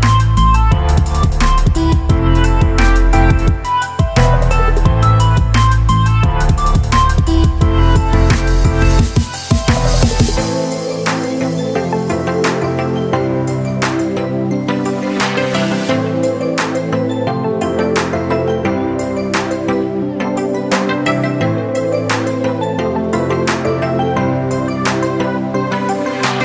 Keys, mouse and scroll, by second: 8.9 alt+space, 9.1 alt+click, 9.4 alt+space, 9.4 typing, 17.5 click, 20.3 click, 22.9 click, 23.0-26.4 drag.